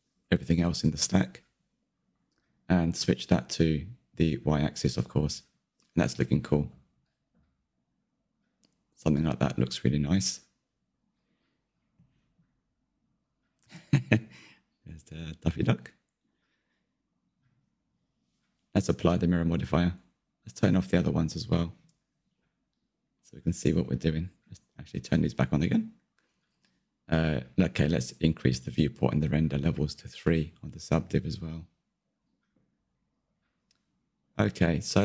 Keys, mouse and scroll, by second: 2.0-4.6 middle drag, 4.6 click, 5.2 click, 6.7 click, 8.3-11.2 middle drag, 11.2-11.9 scroll up 1, 11.9 /, 12.7-13.4 scroll down 3, 13.4-17.8 middle drag, 17.8 click, 18.3 Tab, 19.1 Tab, 21.1-25.4 drag, 26.6 click, 28.7-30.3 drag, 30.5-31.3 middle drag, 31.3-31.8 scroll up 4, 31.8-35.0 middle drag.